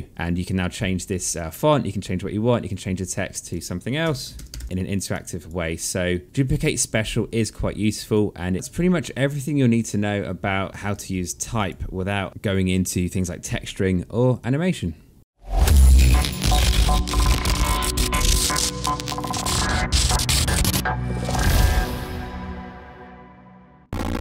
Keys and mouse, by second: 0.0 click, 1.0 click, 2.4 click, 3.5-5.0 typing, 4.8 alt+click, 6.8 alt+middle click, 7.5 click, 8.9 ctrl+z, 11.3 click, 12.1 alt+middle click, 12.4 click, 14.0 click.